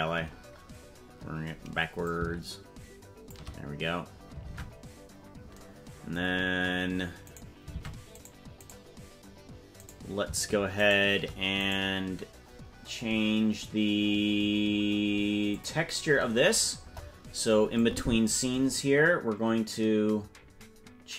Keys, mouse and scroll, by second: 2.0-3.3 shift+drag, 4.5 ctrl+Tab, 7.3 right click, 7.7 ctrl+Tab, 8.7 right click, 9.9 right click, 10.9 shift+right click, 11.7-12.7 right drag, 15.5 click, 16.8 KP_0, 17.8 click.